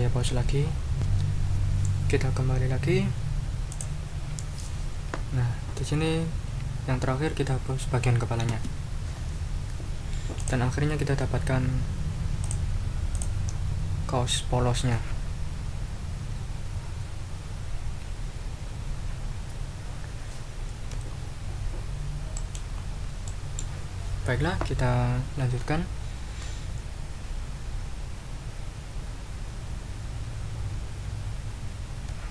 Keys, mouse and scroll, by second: 0.9 ctrl+r, 3.7-4.0 scroll up 2, 4.7-6.3 drag, 8.5 Delete, 10.4 click, 12.4 click, 13.1 click, 21.1-21.7 ctrl+scroll up 4, 21.8 ctrl+scroll down 1, 22.3 ctrl+middle click, 22.7-23.1 ctrl+scroll down 2, 23.3 ctrl+middle click.